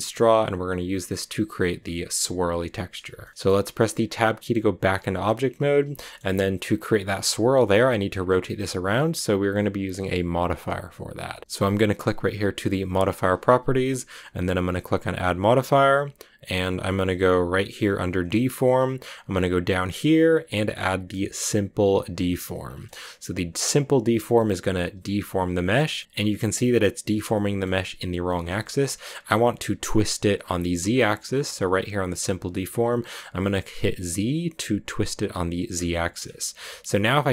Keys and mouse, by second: 3.1 shift+click, 4.7 Tab, 5.8 shift+drag, 15.6-17.6 drag, 22.2-22.7 middle drag, 22.7-24.7 drag, 24.7-25.8 middle drag, 26.0-26.9 middle drag, 27.2 middle drag, 28.3 middle click, 28.5-30.2 shift+middle drag, 35.7 shift+middle drag.